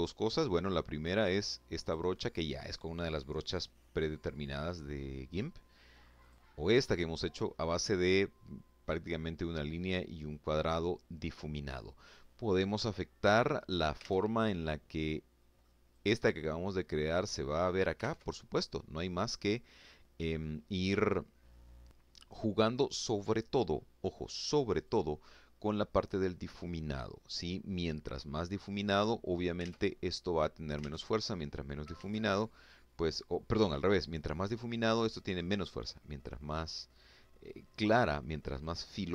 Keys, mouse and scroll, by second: 0.7 click, 3.0-3.7 scroll down 1, 3.8-4.2 scroll up 2, 5.1 click, 13.0 alt+Tab, 13.9 click, 14.8-16.2 drag, 17.0 alt+Tab, 23.8 click, 27.8 click, 28.6 alt+Tab, 29.8 alt+Tab, 30.9 alt+Tab, 34.1 click, 35.1-36.9 drag, 37.5-38.9 drag.